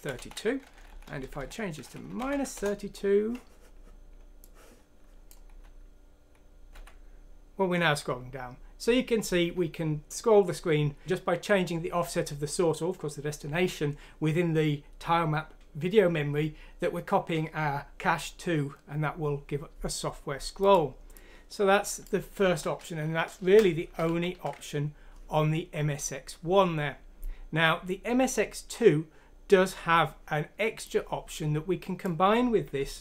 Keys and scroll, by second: 0.0 Left, 0.4 Right, 0.5 Right, 0.7 Right, 0.8 Right, 1.0 Right, 1.2 Right, 1.3 Right, 2.3 F6, 2.5 Return, 5.6 F9, 24.0 q.